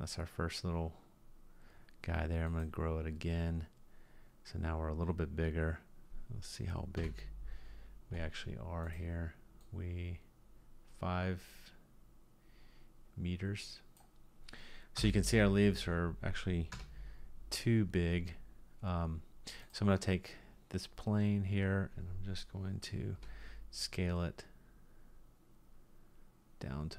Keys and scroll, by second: 7.0 KP_1, 15.0 Delete, 16.7 KP_2, 23.2 s.